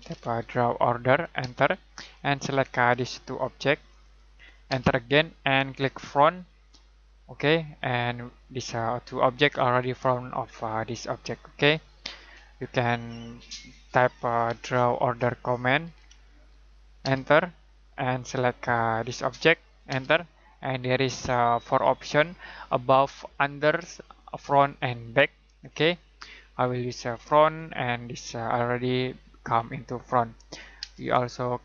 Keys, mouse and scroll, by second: 0.0-0.7 typing, 2.9 click, 4.7 space, 6.3 click, 14.4 typing, 15.6-17.0 typing, 19.0 click, 19.9 space, 27.1 click, 30.8 space.